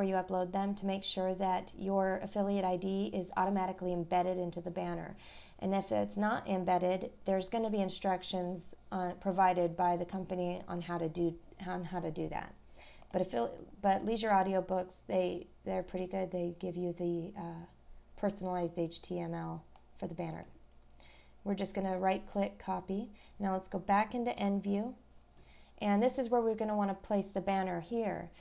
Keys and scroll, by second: 11.1-11.5 scroll down 1, 11.8 scroll up 1.